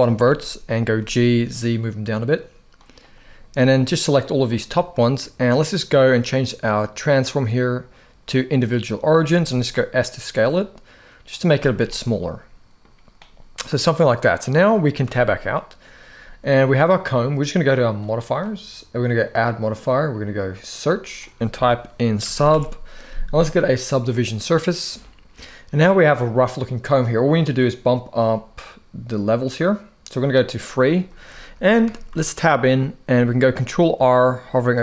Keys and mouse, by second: 0.7 z, 2.5 click, 3.3 click, 5.4-8.3 drag, 9.0 s, 11.0 click, 11.2 z, 11.9 middle click, 14.7 Tab, 15.2 middle click, 17.7 click, 18.2 click, 19.0-24.0 drag, 25.1-25.7 middle drag, 27.3 click, 30.3-30.6 middle drag, 30.8 shift+middle drag, 31.3 middle drag, 31.6 Tab, 31.9 shift+middle click, 33.1 ctrl+r.